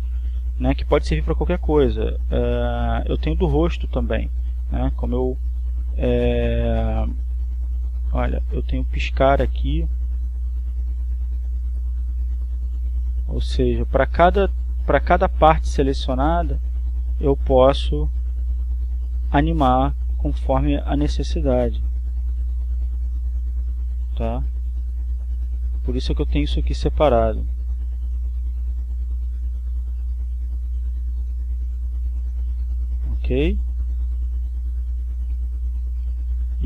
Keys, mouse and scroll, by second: 7.1 right click, 8.9-18.7 drag, 21.7-25.9 drag, 26.3-27.3 drag, 27.9-32.4 drag, 32.8 right click, 34.1-36.6 drag.